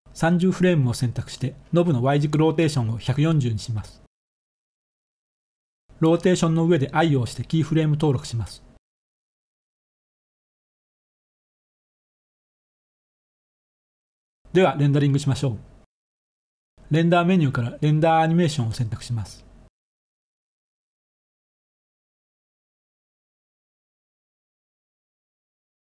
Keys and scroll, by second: 0.6-2.3 typing, 2.4 Return, 6.8 i, 13.6 ctrl+s.